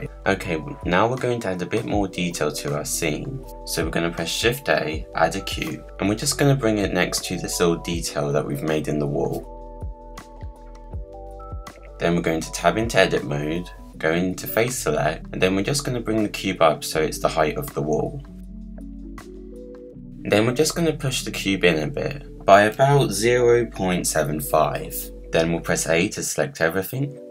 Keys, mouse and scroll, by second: 0.2 click, 0.9 Tab, 1.5-2.4 middle drag, 2.4 click, 2.8-4.0 scroll down 6, 4.0 shift+a, 5.4-6.0 scroll up 2, 6.0-9.8 typing, 6.3 scroll up 1, 6.4 middle click, 6.9 scroll up 1, 7.2 scroll down 1, 7.4 middle click, 9.3 middle click, 9.4 scroll down 4, 9.5 middle click, 10.6 click, 11.0 click, 11.2 BackSpace, 11.3 BackSpace, 11.4 BackSpace, 11.6-12.2 middle drag, 12.2-13.0 scroll down 3, 13.0 click, 13.9 Tab, 14.3 click, 14.8 middle click, 15.7 g, 18.0 scroll down 1, 18.2 middle click, 18.8 click, 20.1 g, 25.3 click, 26.1 a, 27.2 shift+d.